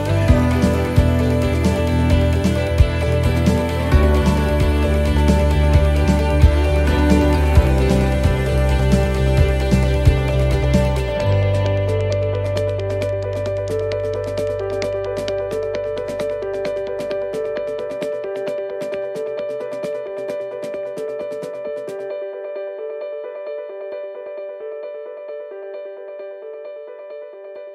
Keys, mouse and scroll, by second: 17.7 click, 18.7 scroll up 2, 21.0 click, 23.5 shift+middle click, 24.2 scroll up 1, 25.0 right click, 26.1 shift+right click.